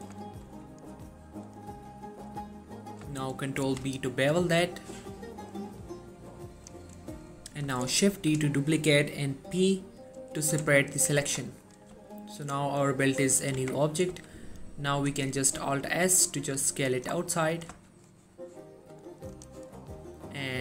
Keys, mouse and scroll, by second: 0.4 shift+middle click, 0.7 scroll up 1, 3.2 ctrl+Num_Lock, 3.2-3.7 scroll up 1, 3.7 ctrl+b, 6.6 click, 8.2 shift+d, 9.2 right click, 10.3 p, 10.9 click, 11.4 Tab, 11.7 click, 12.0 g, 13.2 right click, 13.7 Tab, 14.2 a, 14.7-15.1 scroll up 1, 15.5 alt+s, 17.0 click, 17.2 scroll down 1, 17.4-18.0 middle drag, 19.4 click, 19.8-20.5 scroll up 2, 20.5 middle click.